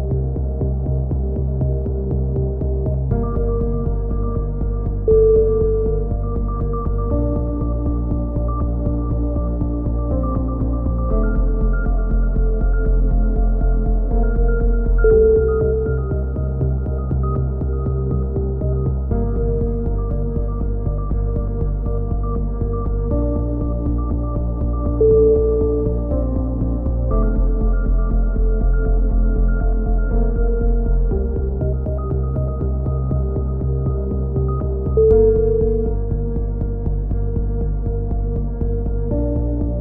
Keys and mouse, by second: 1.3-3.9 drag, 5.4 z, 6.4-9.0 middle drag, 7.4 z, 9.7-10.7 right drag, 10.7 e, 12.1-13.1 drag, 13.1 middle click, 14.8 click, 15.6 z, 15.7-17.3 middle drag, 17.3-19.0 right drag, 18.7-21.1 typing, 19.8 middle click, 23.9 ctrl+r, 26.5-27.9 right drag, 30.5 right click, 31.4-32.4 middle drag, 37.2 click, 38.9 z, 39.5 z.